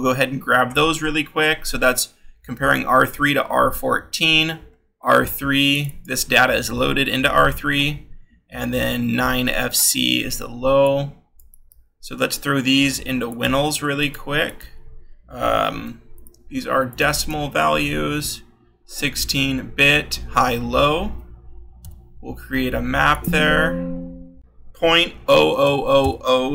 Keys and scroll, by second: 0.7-4.9 scroll, 7.9-11.4 scroll, 11.5 ctrl+c, 14.0 ctrl+c, 16.1 ctrl+v, 22.3 k.